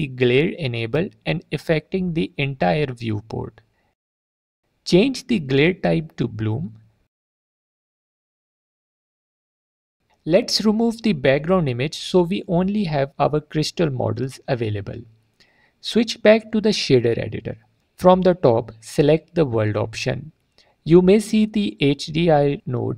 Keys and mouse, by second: 1.8 alt+click, 7.3-8.0 drag, 15.7-17.0 right drag, 18.2 middle click, 19.6-20.5 right drag, 21.2 middle click, 21.9 click, 22.3 click.